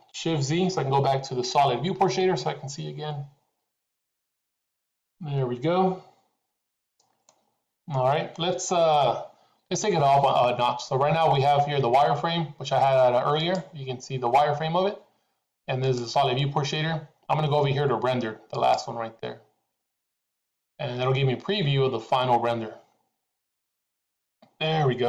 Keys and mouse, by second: 4.0 shift+z, 7.2-8.2 middle drag, 14.2 click, 16.2 click, 23.3-25.0 drag.